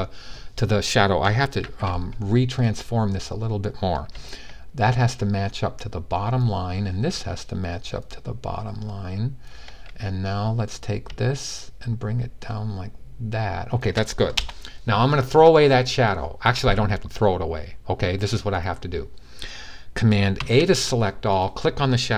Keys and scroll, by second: 1.3 t, 20.1 a.